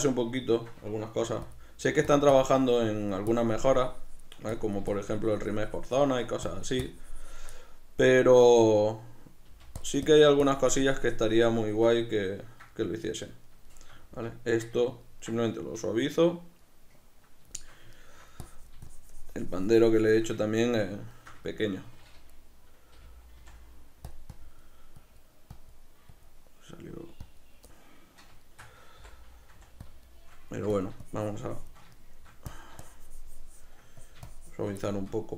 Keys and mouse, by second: 1.3 f, 1.7 click, 1.9 f, 2.5-7.6 drag, 7.6-9.9 middle drag, 9.5 f, 10.2-12.0 drag, 12.0-18.5 middle drag, 18.5-20.5 drag, 20.5-24.2 ctrl+middle drag, 23.1 g, 24.4-27.8 drag, 27.8-29.9 middle drag, 29.1 i, 29.9 click, 30.1 shift+middle click, 30.8-32.0 drag, 32.0 shift+middle click, 32.6-34.9 drag, 34.9 shift+middle click.